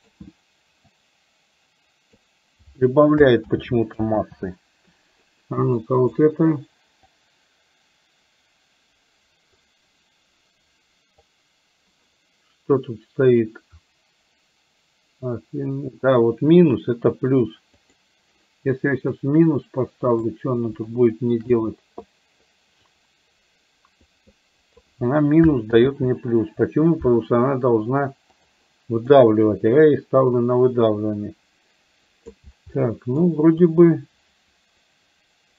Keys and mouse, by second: 1.0-2.3 drag, 3.8 ctrl+z, 4.5 ctrl+z, 6.0 click, 7.2-11.4 drag, 17.8 click, 19.3-20.4 drag, 20.9 shift+middle click, 22.2-24.9 drag, 26.0 ctrl+z, 28.4 click, 29.2-32.3 drag, 32.8 middle click, 33.7-35.5 drag.